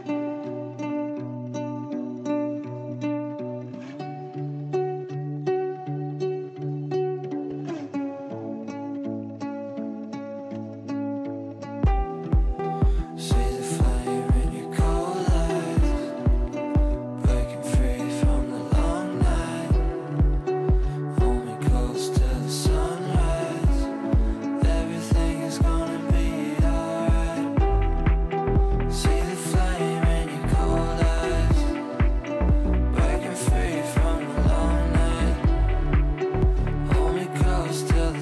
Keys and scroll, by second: 1.3 Delete, 11.2 ctrl+z, 38.1 Delete.